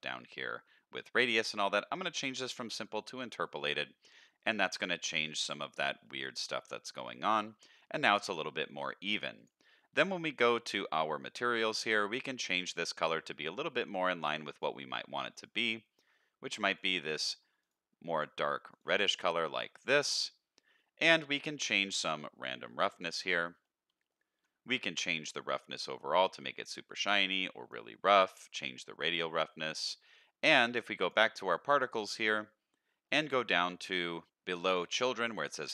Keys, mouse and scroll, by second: 3.0 click, 4.0-4.9 middle drag, 5.1-5.7 middle drag, 6.0-6.8 middle drag, 7.5 scroll up 1, 9.4 click, 11.8 click, 19.7 middle click, 21.8-22.7 drag, 23.6-24.1 middle drag, 25.2-27.7 drag, 28.4 click, 29.8 middle drag, 31.0 click, 33.0-34.3 scroll down 8, 34.3 click, 35.4 click.